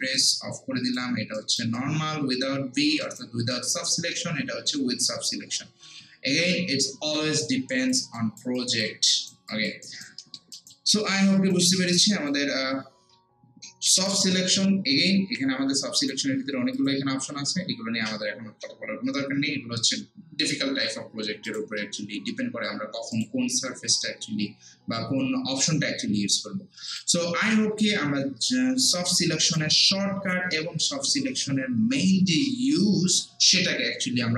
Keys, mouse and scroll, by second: 0.2 click, 1.4 alt+right click, 1.8 alt+click, 3.0 alt+right click, 3.9 alt+middle click, 7.2 alt+click, 8.2 alt+right click, 8.6 alt+click, 9.1 alt+right click, 9.5 alt+click, 9.9 alt+right click, 10.2 alt+middle click, 10.6 alt+right click, 10.9 alt+middle click, 11.3 alt+right click, 11.7 alt+click, 12.1 alt+right click, 12.6 alt+middle click, 16.0 click, 21.5 click, 26.9 click, 28.5 scroll down 1, 28.9 scroll up 1, 29.1 alt+click, 29.8 alt+right click, 30.5 alt+scroll up 1, 30.5 alt+middle click.